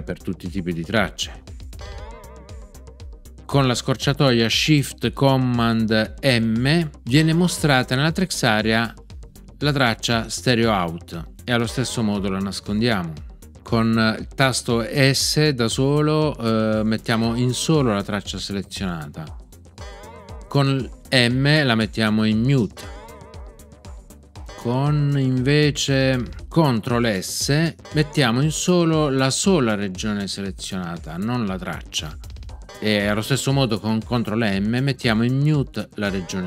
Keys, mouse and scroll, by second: 1.7 super+d, 7.1 shift+super+m, 11.6 shift+super+m, 17.0 s, 22.7 m, 27.8 ctrl+s, 32.6 ctrl+s, 36.0 ctrl+m.